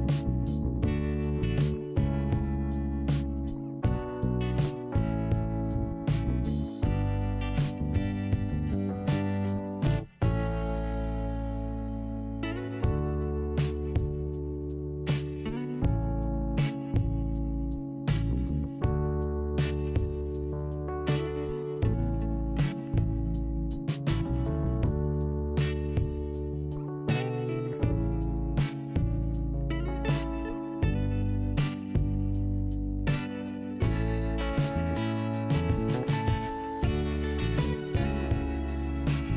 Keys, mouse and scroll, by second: 0.2 scroll up 1, 3.7-4.3 scroll down 1, 6.7 l, 9.2-10.4 scroll down 1, 10.4 scroll down 1, 10.8-11.5 scroll up 1, 11.5 scroll down 1, 12.5 click, 14.2 click, 19.0 click, 19.1 click, 19.5 scroll down 1, 21.3 click, 21.4 scroll down 1, 22.8 click, 22.9 click, 23.6 click, 24.7 click, 26.7 click, 27.7 click, 28.7 click, 31.0 click, 32.6 click, 34.9 click, 36.5 click, 39.0 click.